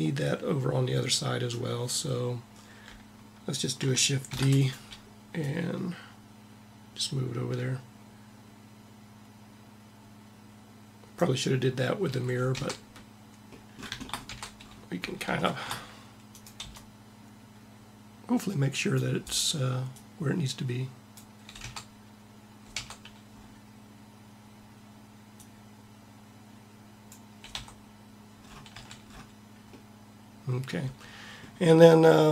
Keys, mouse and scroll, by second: 4.0 shift+d, 5.1-6.8 drag, 11.8 a, 12.3 Tab, 14.0 Tab, 16.0 click, 16.3 c, 17.5 click, 19.7 click, 21.3 Tab, 22.4 Tab, 27.3 Tab, 28.5 a.